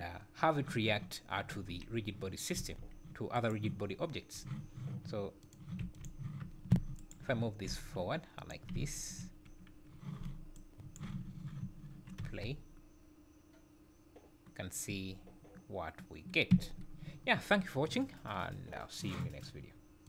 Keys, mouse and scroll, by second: 2.6 s, 5.4 click, 5.8 g, 7.0 shift+right click, 7.7 g, 8.8 `, 10.6 shift+right click, 11.6 `, 12.2 space, 16.6 Escape.